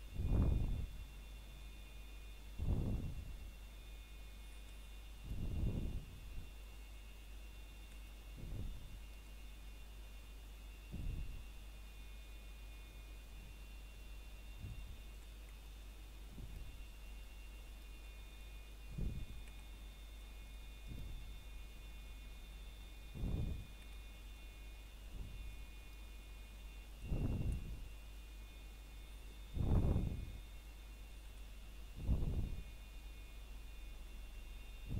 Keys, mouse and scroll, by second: 0.7-1.4 scroll up 1, 1.4 middle click, 2.0-2.7 scroll down 1, 2.7 middle click, 3.0-4.7 scroll up 1, 5.8 scroll down 1, 5.8 typing, 6.5 middle click, 6.9-7.4 scroll up 1, 9.0 ctrl+r, 10.3-11.4 scroll up 1, 11.4 click, 12.8 right click, 13.2-13.5 scroll down 1, 13.5 middle click, 13.8-14.4 scroll up 1, 14.4 middle click, 15.5 scroll down 1, 17.9-18.4 scroll up 1, 18.5 scroll up 1, 18.6 ctrl+Tab, 19.4 click, 21.1 middle click, 22.6 ctrl+right click, 24.2 middle click, 26.7-28.8 scroll up 1, 30.2 a, 30.8 ctrl+right click, 34.4 c.